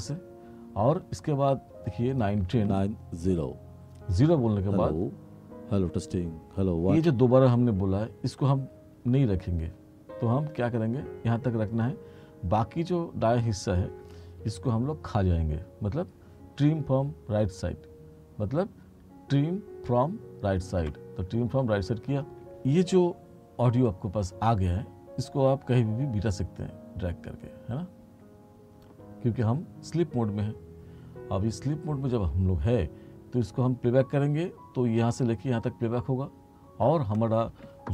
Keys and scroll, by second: 2.5 space, 7.0 space, 20.9 s.